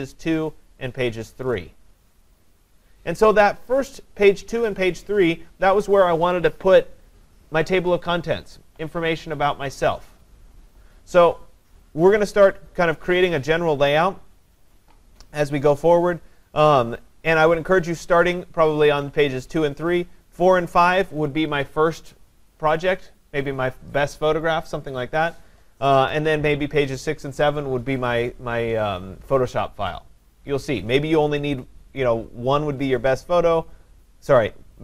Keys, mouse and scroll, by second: 0.4 click, 1.5 click.